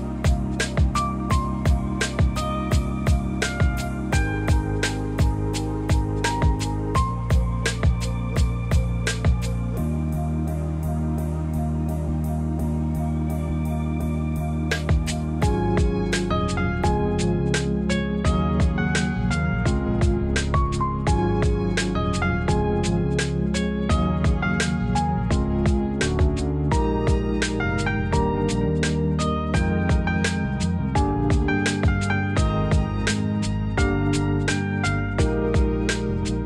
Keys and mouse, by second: 2.2 click, 3.5 shift+click, 4.8 s, 5.2 y, 8.2 click, 9.3 ctrl+r, 10.2 click, 11.6 click, 12.7 s, 14.7 click, 15.4 Tab, 16.5 Tab, 18.6 click, 19.4 g, 19.6 y, 21.1 click, 21.3 Tab, 23.9 Tab, 26.2 click, 26.9 click, 28.5 click, 30.1 e, 30.4 y, 35.0 click, 36.1 click.